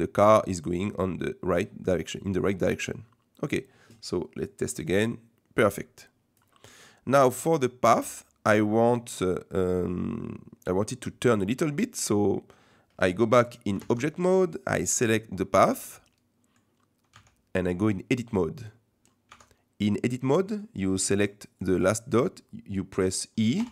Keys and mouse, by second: 4.5-6.4 drag, 6.6-7.1 middle drag, 7.6 middle click, 8.8-9.2 middle drag, 9.5-11.0 middle drag, 11.2-11.6 middle drag, 13.9 ctrl+Tab, 15.0 click, 15.7 middle click, 17.1 Tab, 18.5 middle click, 19.3 Tab, 20.1 middle click, 21.8 click, 23.6 e.